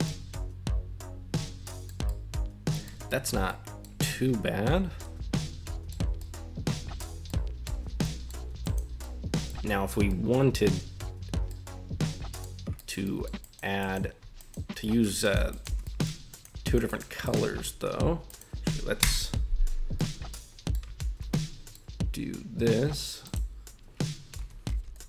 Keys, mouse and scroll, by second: 0.0-1.9 middle drag, 2.1-2.8 middle drag, 3.1 shift+middle drag, 3.5-3.8 middle drag, 4.6-5.9 middle drag, 6.1 scroll up 1, 6.2-7.0 middle drag, 7.2 middle click, 7.7 Tab, 8.0 middle click, 8.6 right click, 9.0 middle click, 10.1 middle click, 11.5 middle click, 12.7 shift+middle click, 13.0 middle click, 13.4 right click, 13.8 right click, 14.3 shift+right click, 14.8 middle click, 15.2 shift+right click, 15.5 shift+right click, 15.8 middle click, 16.3 shift+right click, 16.6 shift+right click, 16.9 shift+right click, 17.2 shift+right click, 18.3 right click, 19.0 ctrl+KP_Add, 19.9 middle click, 21.3 middle click.